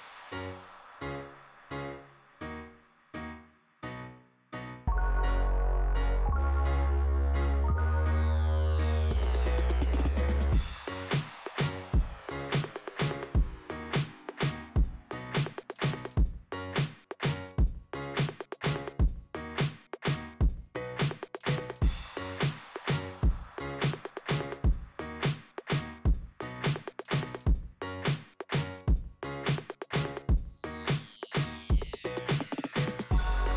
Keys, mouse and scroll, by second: 0.2 scroll up 1, 9.0 scroll down 1, 9.9 scroll down 1, 11.6 scroll up 2, 13.5 click, 13.8 click, 15.8 click, 17.2 click, 18.3 click, 20.2 click, 26.0-26.5 scroll up 2, 30.5 click, 31.8 click, 32.6 click.